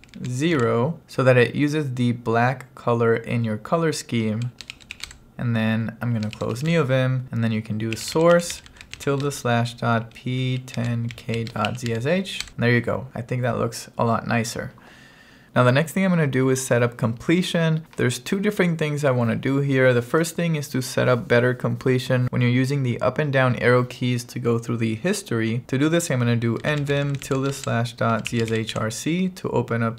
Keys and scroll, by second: 0.0-1.1 typing, 4.5-5.5 typing, 6.6 q, 6.7 Return, 7.7-12.5 typing, 12.5 Return, 25.6 Return, 26.4-29.3 typing.